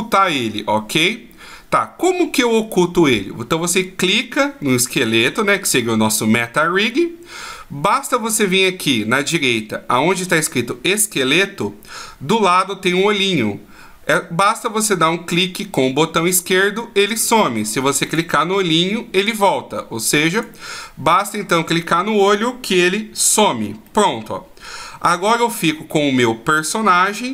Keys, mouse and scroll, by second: 15.3 click, 18.1 click, 21.2-22.9 scroll down 2, 22.9 shift+scroll down 1, 23.9 middle click, 25.2 right click.